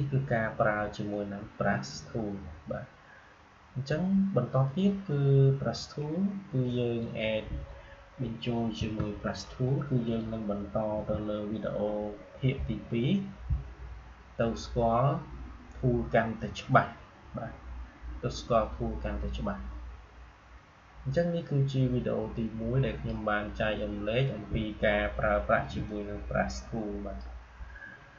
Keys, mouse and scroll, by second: 8.7 Delete, 10.0 click, 10.8 Delete, 22.2-25.8 drag, 25.8-28.1 shift+drag.